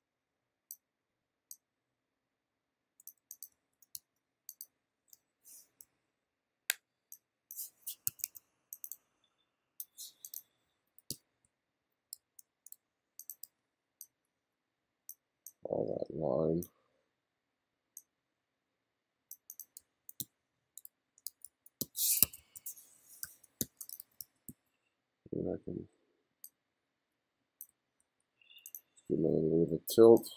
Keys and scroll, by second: 3.6 f, 4.0 g, 5.9 ], 8.1 2, 10.7 f, 11.1 g, 12.2 f, 13.5 b, 19.9 f, 20.2 g, 21.3-24.5 typing, 27.7 b.